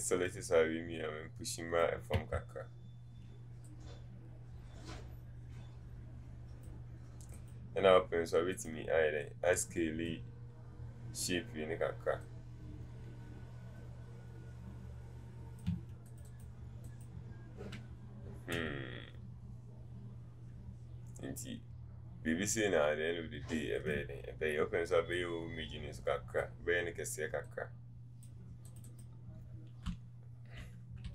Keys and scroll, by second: 2.2 ctrl+z.